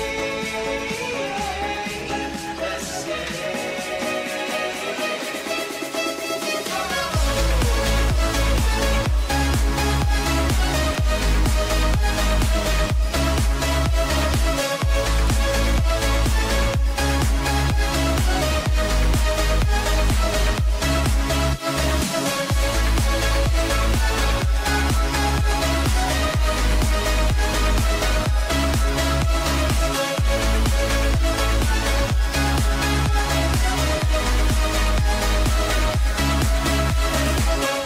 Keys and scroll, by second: 2.5 j, 16.5 h, 21.7 j, 24.4 ], 27.2 j, 31.6 j, 36.7 h.